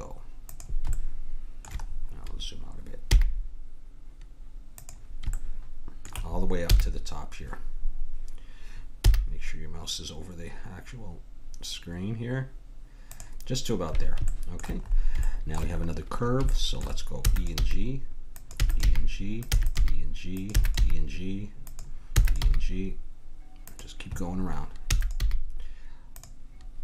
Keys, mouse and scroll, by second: 3.1 g, 5.5 middle click, 6.7 g, 9.0 g, 14.3-15.3 middle drag, 17.2-20.8 typing, 18.3 click, 22.1 e, 22.4 g, 24.8 e, 25.2 g.